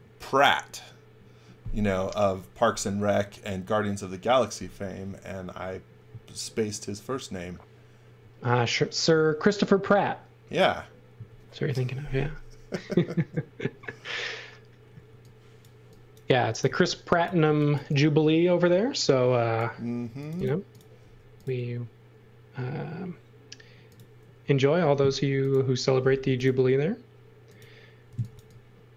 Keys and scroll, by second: 15.1 x, 16.2-17.7 typing, 20.0 space, 21.0 f, 24.4 space, 26.2 m, 27.8-28.9 typing.